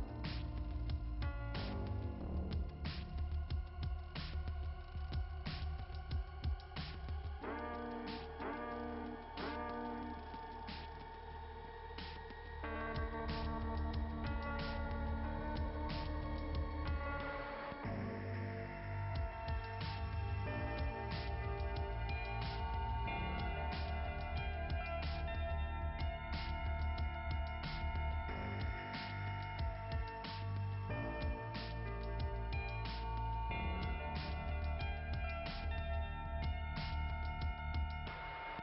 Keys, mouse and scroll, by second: 1.1 click, 2.9 click, 3.4 click, 4.8 click, 5.6 click, 6.2-7.1 scroll down 2, 7.3 scroll down 2, 8.2 click, 10.1 click, 12.0 click, 14.1 click, 15.9 click, 17.5 click, 21.2 click, 23.6-23.9 scroll down 3, 27.0 click, 30.6 click, 34.1 click, 36.4 click, 37.0 click.